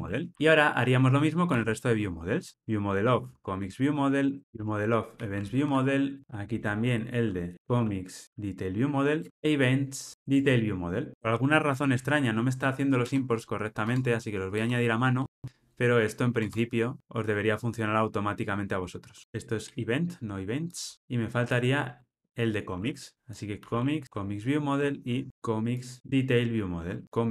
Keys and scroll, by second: 0.1 alt+super+l, 2.5 Escape, 4.5 Tab, 7.9 alt+shift+Left, 9.3 alt+super+l, 10.1 Return, 10.3 Tab, 13.8 Tab, 19.2 alt+super+[, 22.0 super+c, 24.0 Tab.